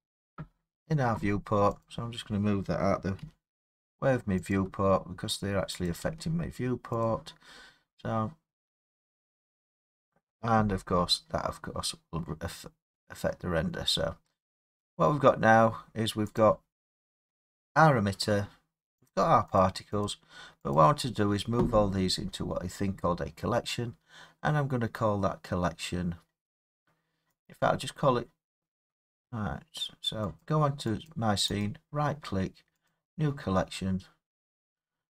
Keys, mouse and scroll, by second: 1.8 click, 3.2 g, 4.5 click, 5.9 click, 6.1 g, 7.1 click, 12.4 middle click, 13.8 middle click, 13.8 middle click, 16.4 click, 19.1 click, 19.6 click, 20.0 click, 20.8 click, 22.2-25.7 scroll, 27.5 right click, 30.4 click, 31.1 click, 31.6 right click, 32.9 click, 33.7-35.1 scroll.